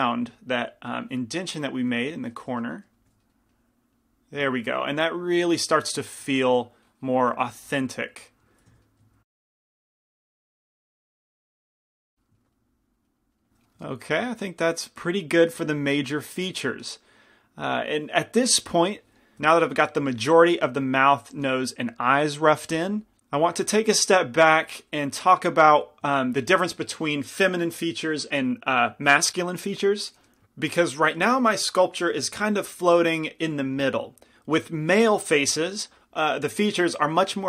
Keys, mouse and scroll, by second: 2.8 middle click, 3.4 middle click, 4.4 middle click, 6.5-9.1 drag, 7.6 shift+f, 9.5 middle click, 10.1-11.1 typing, 11.3-12.8 drag, 12.2-15.0 middle drag.